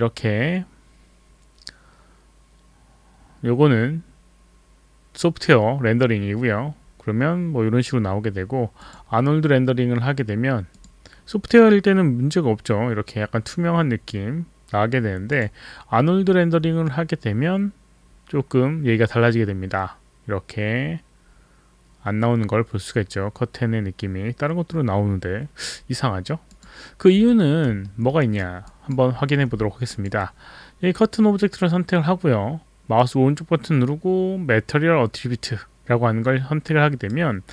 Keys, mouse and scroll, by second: 8.8 click, 10.7 click, 15.3 click, 26.5 click, 27.9 alt+middle click, 28.2 alt+right click, 28.8 alt+drag, 29.2 alt+middle click, 29.9 click, 33.0 right click.